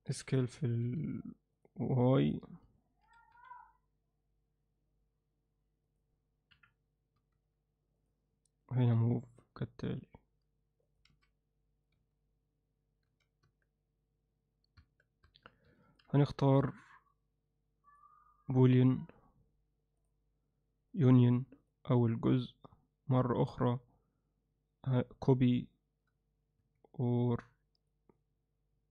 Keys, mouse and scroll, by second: 3.1 s, 6.5 KP_1, 7.2 z, 9.0 g, 12.0 z, 13.5 Tab, 14.8 Tab, 18.3-28.9 drag.